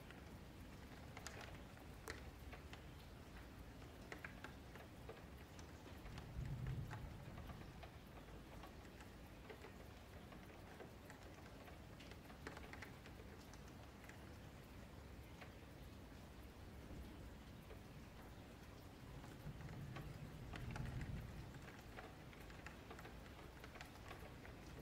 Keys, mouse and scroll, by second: 0.4-0.7 scroll up 2, 0.7 middle click, 1.2 Tab, 1.2-1.5 scroll down 4, 1.5-3.1 middle drag, 3.1-3.8 scroll down 6, 3.8 middle click, 4.3-5.9 scroll up 9, 5.9-6.2 scroll down 2, 6.2-8.8 middle drag, 8.8-9.2 scroll up 2, 9.2 click, 9.8 Tab, 10.6 click, 11.3 ctrl+click, 11.7 ctrl+click, 12.4 ctrl+click, 12.7 middle click, 13.3 scroll up 1, 13.6 middle click, 14.0-14.7 scroll up 2, 14.7 e, 16.9 scroll down 2, 17.2 Tab, 17.3-17.8 middle drag, 17.8-19.1 scroll down 9, 19.1-19.8 scroll up 7, 19.2 ctrl+s, 19.8-21.1 middle drag, 21.1-21.4 scroll up 2, 21.4 shift+middle drag, 21.7 click, 22.0 middle drag, 22.2 Tab, 22.8-24.0 middle drag, 24.0 3, 24.2 click, 24.4 middle click.